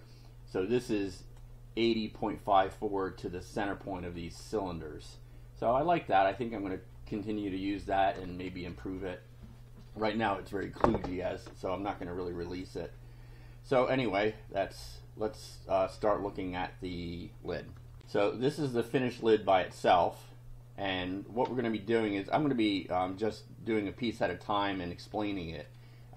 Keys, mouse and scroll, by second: 0.5-1.5 drag, 4.1-4.6 scroll down 2, 5.1-6.5 drag, 6.9-7.6 scroll down 4, 8.0-9.0 shift+drag, 11.9 click, 18.0 ctrl+r, 23.1-24.5 drag.